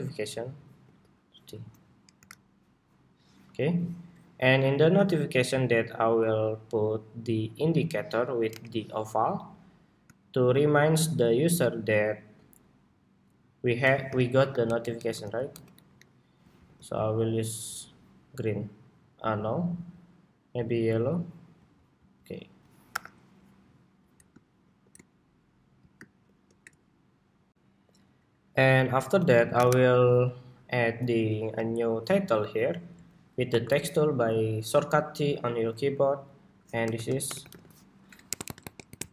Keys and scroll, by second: 4.8 super+=, 19.3 ctrl+c, 25.7 super+-, 27.2 shift+super+2, 29.3 super+=.